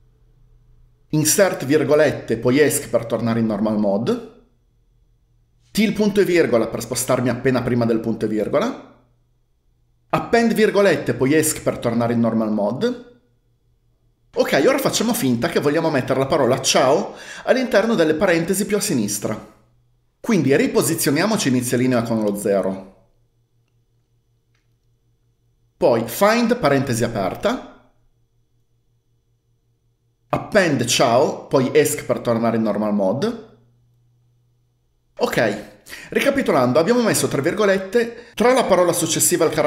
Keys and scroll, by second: 1.6-2.0 typing, 2.3 Escape, 5.8-6.8 typing, 10.4 a, 10.9 ", 11.2 Escape, 22.7 0, 26.5-27.7 typing, 30.5-32.2 typing.